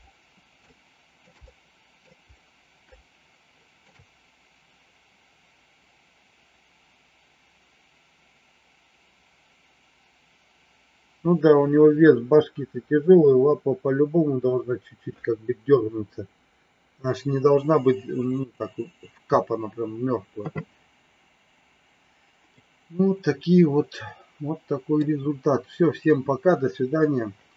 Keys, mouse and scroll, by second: 0.6 shift+middle click, 1.3 middle click, 2.8 shift+middle click, 22.5-24.8 middle drag.